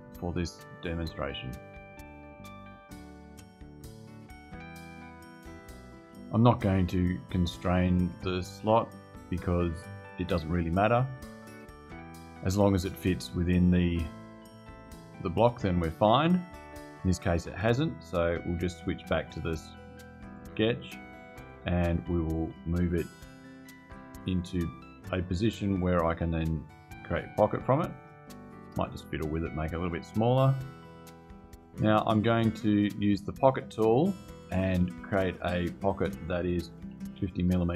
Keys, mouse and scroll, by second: 2.6 click, 3.6 click, 4.9 click, 11.4 click, 18.5 click, 19.9 click, 22.6-24.1 drag, 25.5-26.9 drag, 27.5-28.9 drag, 30.7 click, 35.0 click, 36.4-37.4 typing.